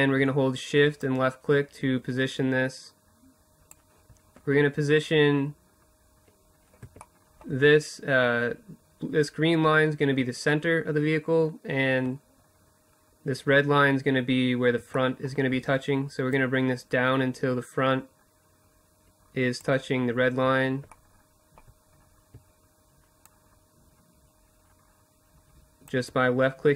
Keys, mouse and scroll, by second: 5.4-14.7 middle drag, 14.7-16.8 drag, 18.4 middle click, 18.6-22.0 middle drag, 22.0-23.4 drag.